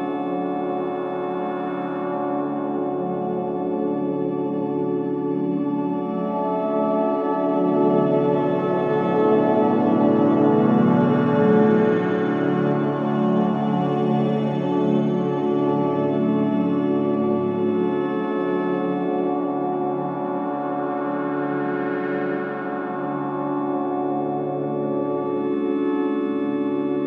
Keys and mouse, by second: 1.1 click, 1.9 click, 2.6 click, 3.3 click, 3.8 g, 4.2 z, 5.0 Escape, 5.2-6.7 drag, 6.0-7.4 typing, 8.8-11.5 alt+drag, 11.6 KP_Divide, 12.1 typing, 12.4-13.8 alt+drag, 14.0-15.9 typing, 15.2 click, 17.2 alt+a, 17.9-18.4 typing, 19.0 alt+click, 26.7 click.